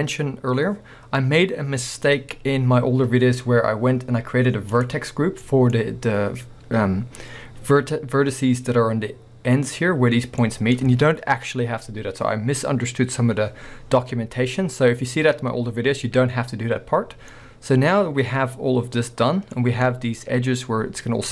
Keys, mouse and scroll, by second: 2.0 scroll down 1, 3.5-4.8 scroll up 1, 4.8 click, 5.5 middle click, 5.8 scroll up 1, 9.8-18.8 middle drag, 13.8-14.1 scroll down 2, 17.2 scroll down 2, 19.6-19.9 scroll up 1, 20.1 middle drag, 20.2 scroll up 1, 21.2 middle drag, 21.2 scroll down 2.